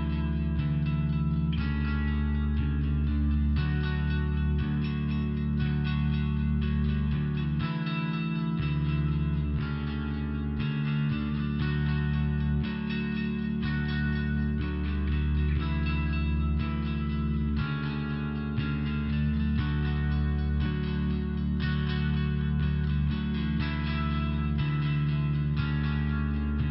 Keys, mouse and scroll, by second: 1.2 click, 8.3 click, 8.4 click, 9.6 click, 9.7 click, 11.3 click, 11.4 click, 21.2 click, 21.4 click, 23.2 click, 23.4 click, 26.6-26.7 typing.